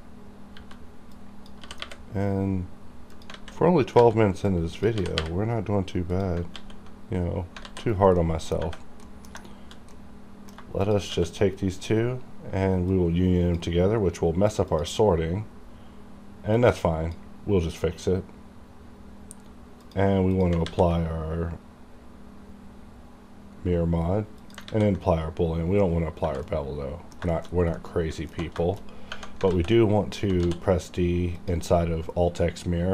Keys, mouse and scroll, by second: 0.5 b, 1.1 click, 1.2 click, 1.7 g, 3.1 click, 3.4 alt+a, 4.0 b, 4.5 click, 5.0 g, 6.1 click, 6.6 alt+x, 7.6 alt+z, 8.2 middle click, 8.8 scroll down 1, 9.1 middle click, 9.9 middle click, 10.8 shift+click, 11.1 q, 12.9-19.4 drag, 19.9 click, 20.7 a, 24.4 click, 24.7 ctrl+a, 26.5 middle click, 27.3 shift+middle click, 27.6 scroll down 1, 27.8 middle click, 28.6 shift+middle click, 28.8-29.1 shift+scroll down 3, 29.5 alt+x, 30.4 d, 31.4 click.